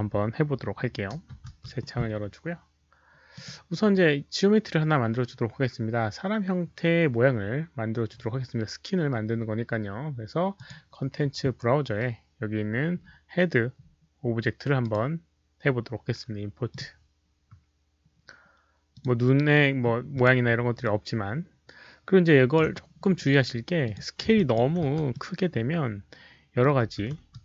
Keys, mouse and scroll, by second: 0.1 click, 1.0 ctrl+n, 3.3 click, 6.4 ctrl+n, 6.4 click, 8.2 ctrl+n, 8.2 click, 9.5 ctrl+n, 9.5 click, 10.5 click, 12.9-13.2 scroll down 1, 13.7 scroll up 1, 14.7 right click, 16.6 click, 18.9 click, 19.4 middle click, 20.1 click, 20.8-22.5 alt+drag, 23.8 alt+click, 24.3 alt+click, 24.8 r, 25.1-26.5 middle drag, 26.8 f, 27.2 alt+right drag.